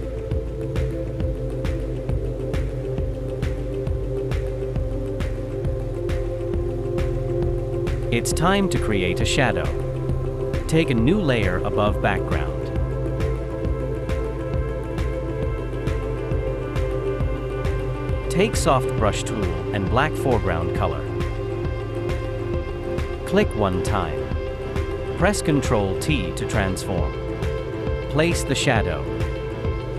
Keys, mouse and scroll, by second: 25.3 ctrl+t.